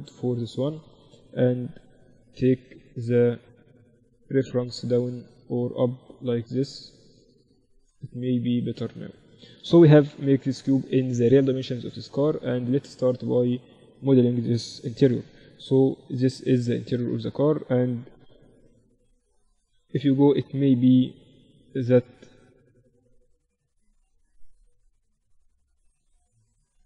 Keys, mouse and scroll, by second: 0.9-4.3 middle drag, 4.3-7.9 drag, 9.1-13.4 middle drag, 10.2 n, 14.8 KP_7, 17.3-20.0 middle drag, 18.3 KP_7, 20.0 KP_1, 23.4 middle click, 26.6 KP_3.